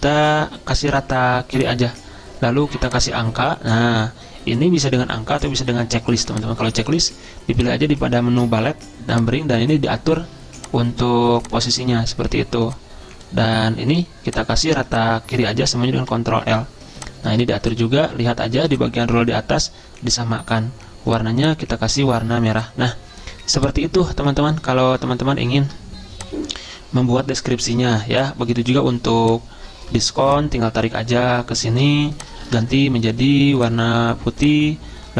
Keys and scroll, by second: 16.2 ctrl+l, 32.6 ctrl+a.